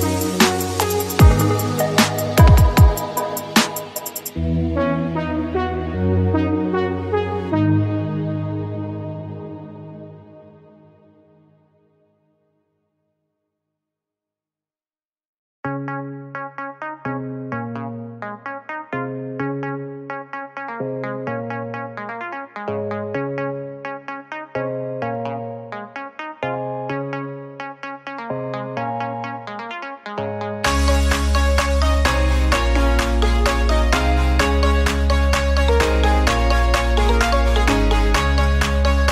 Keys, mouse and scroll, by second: 0.4 z, 1.0-2.2 scroll down 2, 2.2 Tab, 2.2 click, 3.0 click, 3.8-5.1 middle drag, 5.1 Tab, 5.5-7.0 middle drag, 7.0 click, 7.6 middle click, 7.9-8.7 scroll up 2, 8.7-9.9 middle drag, 9.9 click, 10.5 shift+click, 10.9 shift+click, 11.4 shift+click, 12.0 shift+click, 12.6 shift+click, 13.0 shift+click, 13.4 middle click, 14.2 e, 15.0 click, 16.8 e, 17.7 click, 19.2 e, 20.3 click, 21.9 Tab, 22.2-23.4 middle drag, 23.4 click, 23.8-24.2 scroll down 1, 24.2-26.3 middle drag, 26.3 ctrl+z, 26.5 ctrl+z, 27.5 middle click, 27.7-28.2 scroll up 2, 28.2 click, 29.2 ctrl+z, 29.4 ctrl+z, 30.2-30.6 scroll up 3, 30.6-31.9 middle drag, 31.9 e, 32.9 click, 34.2 Tab, 34.9 Tab, 35.7 ctrl+r, 37.4 ctrl+r, 38.6 Tab.